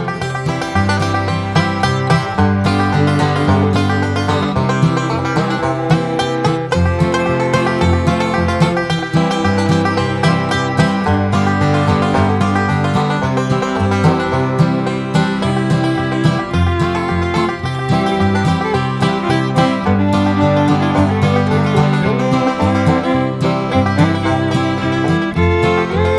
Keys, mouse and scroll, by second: 0.6 ctrl+click, 1.4 ctrl+click, 2.4 ctrl+click, 2.8 ctrl+click, 4.8 ctrl+click, 5.3 ctrl+click, 6.2 ctrl+shift+click, 7.6 shift+click, 8.5 click, 9.4 click, 10.3 click, 12.4 ctrl+click, 13.1 ctrl+click, 14.1 ctrl+click, 14.7 ctrl+click, 15.4 ctrl+click, 15.7 ctrl+click, 16.3 ctrl+click, 16.5 ctrl+click, 17.1 ctrl+click, 17.7 ctrl+click, 18.4 ctrl+click, 18.8 ctrl+click, 19.8 ctrl+click, 20.4 ctrl+click, 20.9 ctrl+click, 21.3 ctrl+click, 22.0-22.4 scroll up 2, 23.0 ctrl+click, 25.3 click.